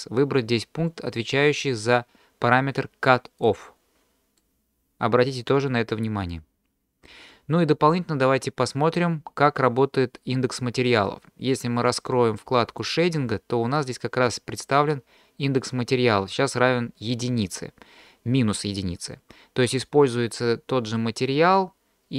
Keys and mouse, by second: 4.5-7.1 middle drag, 12.7 click.